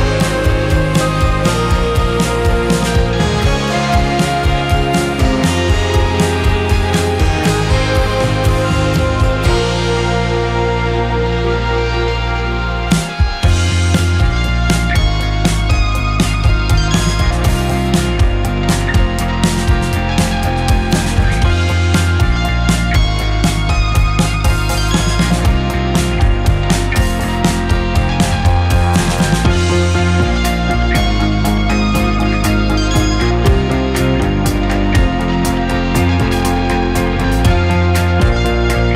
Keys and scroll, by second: 2.8 7, 5.5 KP_5, 5.6 Return, 14.3 space, 17.5 space, 25.7 space, 30.2 space, 32.3 space, 38.0 KP_0.